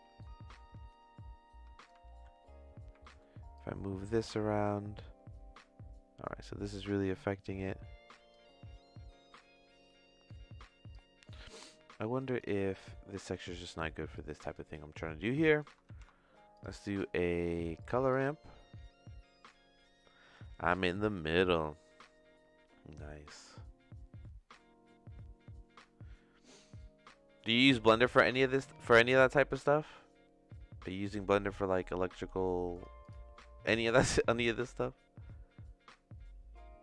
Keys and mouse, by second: 0.2-1.8 drag, 3.1 click, 3.5-8.3 drag, 8.8 middle click, 8.9 click, 9.0 middle click, 10.2 click, 11.2 middle click, 12.2 click, 12.8 click, 13.5 click, 14.1 click, 14.8 click, 15.3 click, 15.9 shift+a, 26.6-28.6 drag, 29.9-32.2 drag, 32.7 click, 33.6 click, 34.5-36.8 drag.